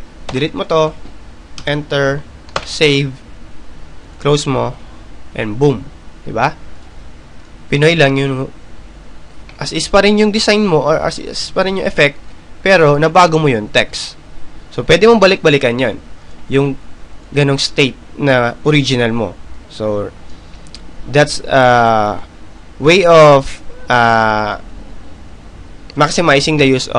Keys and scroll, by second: 1.8 t, 5.6 Delete, 6.5 Return, 7.9 ctrl+s, 14.4 ctrl+z.